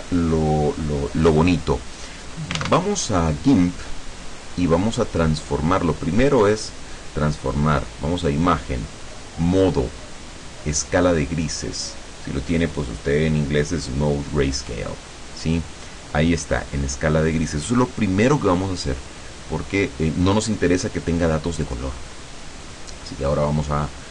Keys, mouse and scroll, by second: 2.7 alt+Tab, 8.4 click, 15.1 click, 23.3 click.